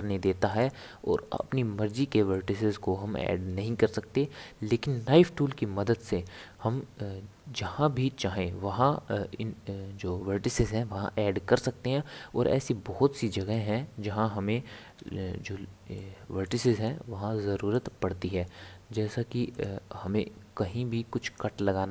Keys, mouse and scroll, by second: 15.0 k, 16.0-19.0 middle drag.